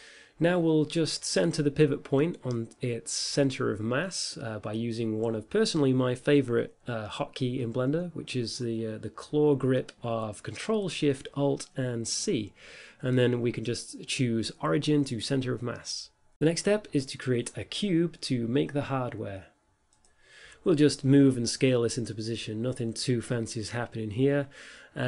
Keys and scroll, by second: 0.0-0.9 typing, 1.2 Return, 2.4-3.5 typing, 4.3 Return, 11.6 alt+shift+c, 17.0 a, 21.5-24.0 typing.